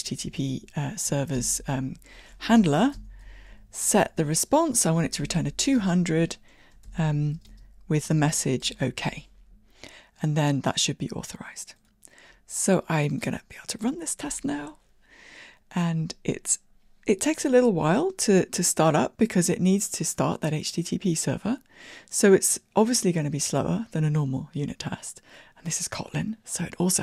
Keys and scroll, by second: 1.1 Tab.